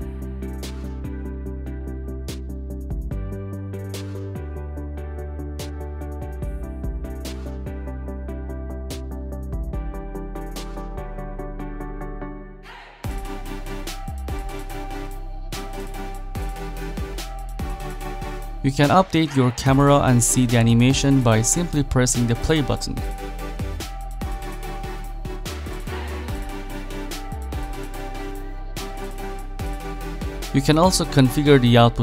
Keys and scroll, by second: 8.9-9.8 typing, 12.0 8, 12.3 Return.